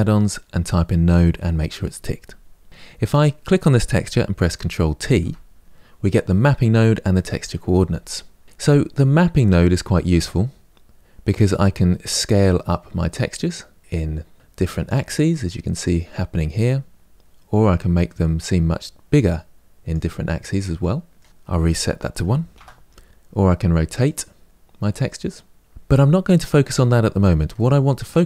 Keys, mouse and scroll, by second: 2.9 click, 4.9 ctrl+t, 5.6-12.1 middle drag, 12.1-14.3 drag, 16.9-20.3 drag, 20.3-22.3 middle drag, 22.3-25.7 drag, 25.7 ctrl+z.